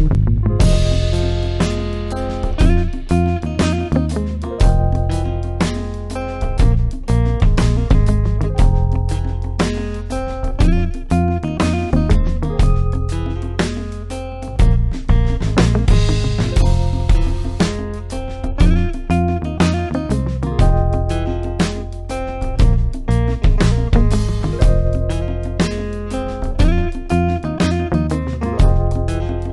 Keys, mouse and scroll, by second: 0.1 click, 3.4-9.6 drag, 15.7 click, 21.4 click, 22.7 ctrl+space, 22.9 ctrl+click, 23.0 ctrl+click, 23.2-23.9 ctrl+space, 24.1 click, 24.1-26.4 space, 28.9 space, 29.1 ctrl+click, 29.2 ctrl+click, 29.4-29.5 ctrl+space.